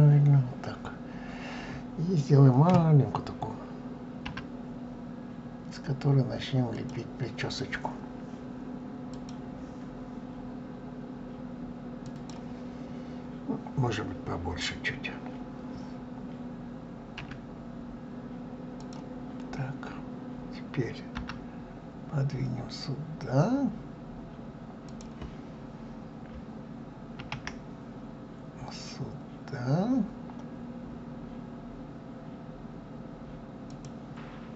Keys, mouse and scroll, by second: 0.8-2.1 scroll up 1.